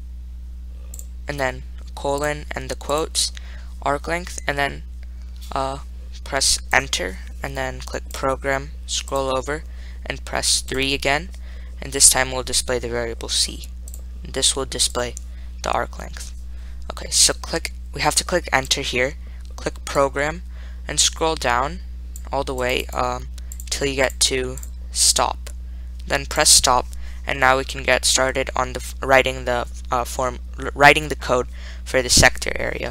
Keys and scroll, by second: 1.2 ^, 2.5 ., 7.0 Return, 9.3 Right, 11.0 3, 17.1-17.9 typing, 18.9 Return, 22.4 Down, 22.9 Down, 23.1 Down, 23.8 Down, 24.3 Down, 24.8 Down, 26.7 Return.